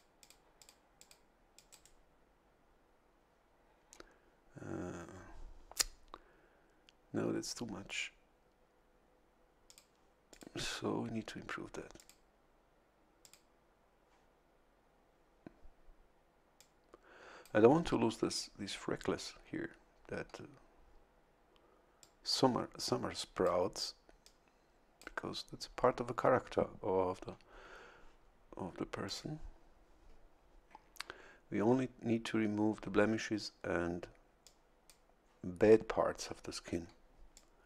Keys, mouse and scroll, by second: 0.2 click, 0.6 click, 1.0 click, 1.5 click, 1.7 right click, 9.7 click, 10.3 click, 11.9 click, 13.2 click, 16.6-17.8 drag, 22.0-23.6 drag, 24.2 click, 29.0 click, 34.4 click, 37.3 click.